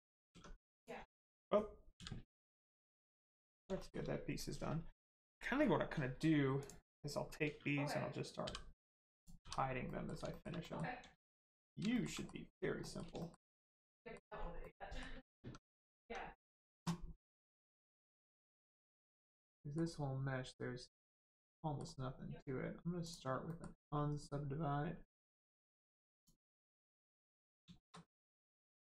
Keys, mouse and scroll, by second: 0.2 Tab, 0.7 click, 2.9 scroll down 1, 3.1 middle click, 3.7 shift+middle click, 6.5 click, 8.4 h, 9.1 click, 9.8 middle click, 10.3 shift+middle click, 10.6 middle click, 10.7 middle click, 11.3 click, 11.9 shift+middle click, 12.1 middle click, 12.5 scroll up 1, 12.8 middle click, 13.1 shift+middle click, 13.5 scroll up 1, 13.9 middle click, 14.3 scroll up 1, 14.6 middle click, 15.4 Tab, 17.1 middle click, 18.0 Tab, 18.4 middle click, 21.5 middle click, 23.0 click, 23.5 shift+middle click, 25.0 middle click, 26.1 click, 26.9 middle click, 27.7 shift+middle click, 28.1 middle click.